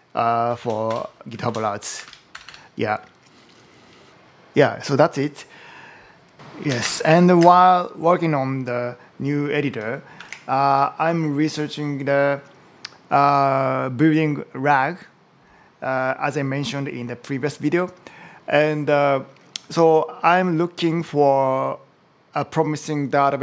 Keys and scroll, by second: 0.3 Down, 0.7 Return, 1.1 Down, 1.9 shift+super+Left, 2.1 BackSpace, 10.0 ctrl+shift+super+m.